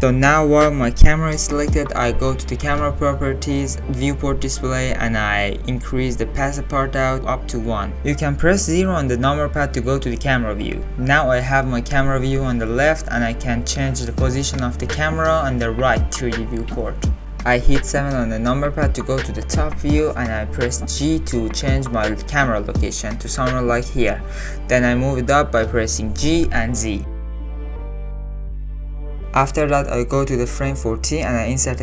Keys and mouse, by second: 2.9 click, 3.3 click, 4.7 click, 5.2 click, 6.2 click, 9.2 click, 10.1 KP_0, 14.2 g, 17.1 ctrl+z, 18.1 KP_7, 19.3-19.6 shift+middle drag, 20.8 g, 25.4-26.0 drag, 26.5 g, 31.7 Right.